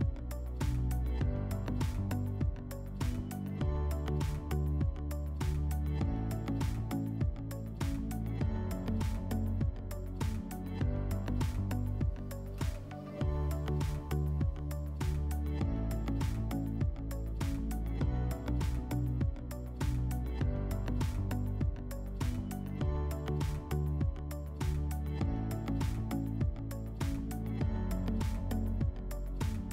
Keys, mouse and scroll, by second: 0.0-0.6 typing, 3.4 right click, 3.8 w, 5.4 shift+click, 6.7 click, 7.9 click, 8.4 click, 10.2 alt+w, 11.6 alt+middle click, 12.7 middle click, 13.2 scroll, 14.1 click, 15.3 click, 19.0 click, 20.1 click, 23.6 click, 26.1 click, 28.1 click.